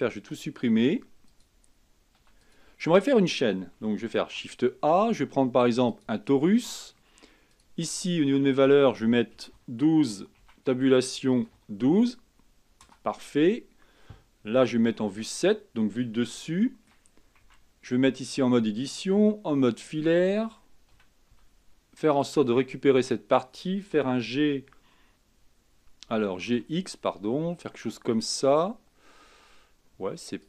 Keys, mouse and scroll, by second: 0.1 x, 1.5 click, 2.4 x, 4.3 shift+a, 7.7-11.8 drag, 15.0 KP_7, 15.5-15.9 scroll up 5, 16.7-17.6 shift+middle drag, 17.6 Tab, 19.2 z, 21.1 a, 21.5 b, 24.2 g.